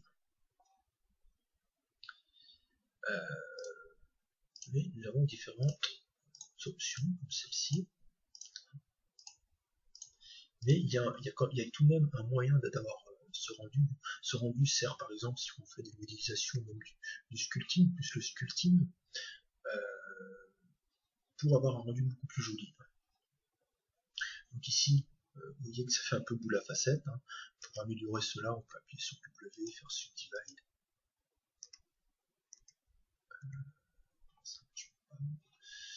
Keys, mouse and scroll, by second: 3.7-5.5 drag, 11.5 click, 11.6-12.1 scroll up 1, 12.1-14.3 scroll down 1, 14.3-19.9 middle drag, 15.9 Tab, 28.7 w, 30.0 w, 31.6 Tab.